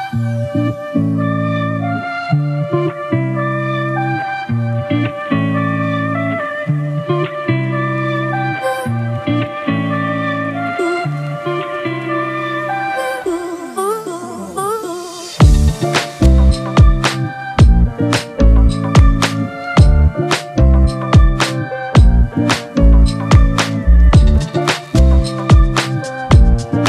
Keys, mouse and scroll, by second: 2.4 right click, 4.1 typing.